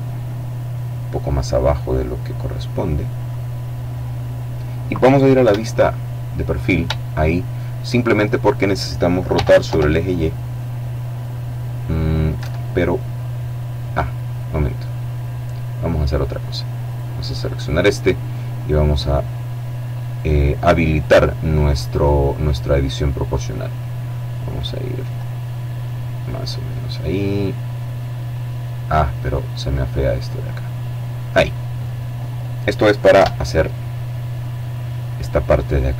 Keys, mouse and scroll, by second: 2.1 click, 2.6-3.0 scroll down 1, 3.0 middle click, 4.5 KP_1, 6.3-7.6 shift+drag, 8.4 r, 8.7 y, 11.4 Escape, 15.9 right click, 17.3 click, 18.3 click, 22.3-23.5 drag, 23.5-24.0 scroll up 1, 24.0-24.8 scroll down 2, 24.9-25.4 scroll down 2, 25.4-25.9 scroll down 2, 28.2-28.9 scroll up 2, 32.2 KP_7, 33.3-34.0 scroll down 1.